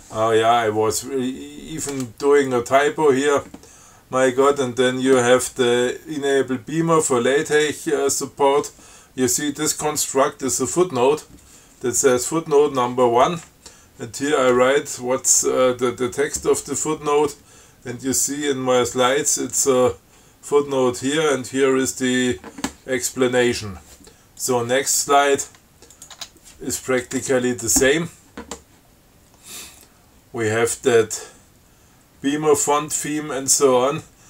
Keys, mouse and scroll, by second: 2.7 click, 24.7 click, 26.2 click, 26.4 Tab, 27.4 Tab.